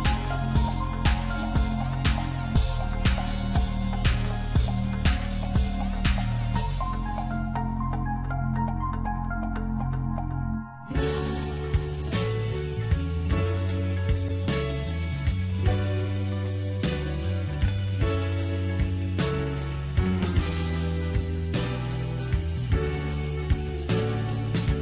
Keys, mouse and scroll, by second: 0.6 s, 4.5 g, 8.6-9.2 scroll down 5, 9.2-11.6 middle drag, 11.6 Tab, 12.2 click, 13.8 click, 14.5 Tab, 15.0 click, 15.6 click, 16.3 Tab, 16.9 middle click, 17.8 click, 18.4-18.8 scroll up 4, 18.8 Tab, 20.6 click, 22.2 click.